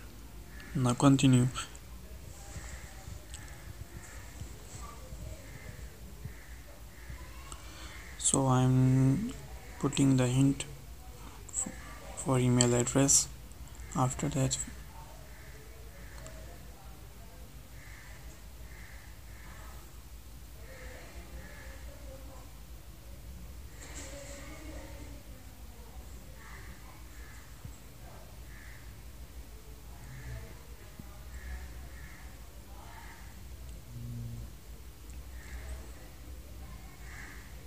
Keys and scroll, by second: 11.7 ctrl+Left, 17.3 ctrl+space, 24.8 ctrl+Left, 28.6 ctrl+space, 31.8 ctrl+space, 37.2 ctrl+shift+Left.